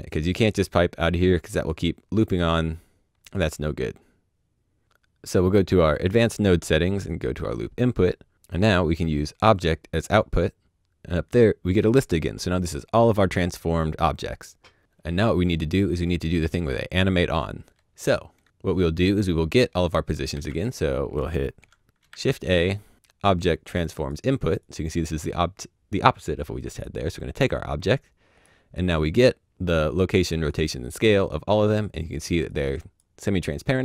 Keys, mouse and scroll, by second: 1.3 click, 4.8 click, 5.9 click, 10.1 click, 17.9 click, 18.9 click, 19.9 shift+s, 21.9 shift+s, 22.0 shift+a, 23.9 click, 27.3 click, 32.4 click.